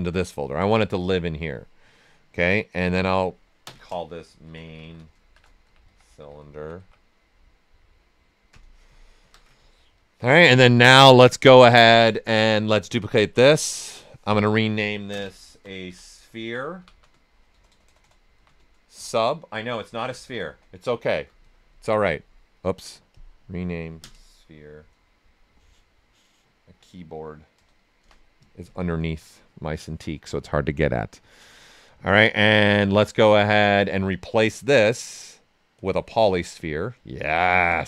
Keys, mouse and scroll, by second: 2.7 click, 4.4-7.2 typing, 8.5 Return, 10.9-12.8 drag, 15.6-20.6 typing, 23.1 click, 28.0 Return, 31.1 right click, 31.8 right click, 32.9 w, 33.2 right click, 34.1 click, 36.8 right click, 37.4-37.8 ctrl+right drag.